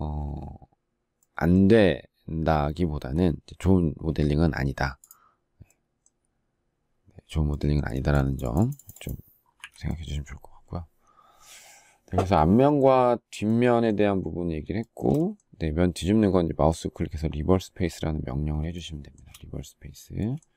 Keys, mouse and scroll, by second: 7.7 space, 9.4 Delete, 14.6 shift+middle click, 18.5 shift+middle click.